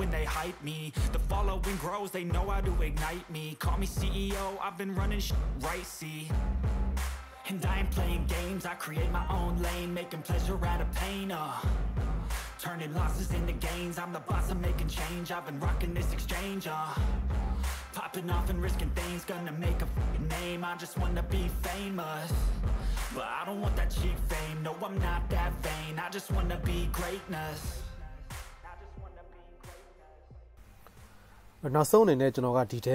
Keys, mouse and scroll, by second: 0.5 KP_0, 2.0 KP_0, 2.0 KP_0, 2.3 shift+middle click, 2.5 shift+middle click, 3.8 middle drag, 4.4 middle click, 5.3 ctrl+c, 6.2 KP_0, 8.8 click, 9.5 click, 10.0 middle click, 10.2 ctrl+Tab, 10.4 middle click, 10.6 middle click, 12.3 ctrl+Tab, 13.1-15.8 shift+middle drag, 15.8 right click, 16.1-17.5 middle drag, 17.5-18.0 drag, 18.0-18.8 middle drag, 18.8 right click, 18.9 shift+click, 19.2 right click, 19.4 shift+click, 19.6 right click, 19.7 shift+click, 20.6-22.0 middle drag, 22.0 right click, 22.5-24.1 middle drag, 24.1 right click, 24.4 middle click, 25.3 right click, 25.3 middle click, 25.6 right click, 25.7-29.1 middle drag, 27.8-28.2 drag, 27.8-28.2 right drag, 27.8 z, 28.3 drag, 28.3-28.6 right drag, 28.8-32.9 right drag, 30.1-30.9 middle drag, 30.4 z.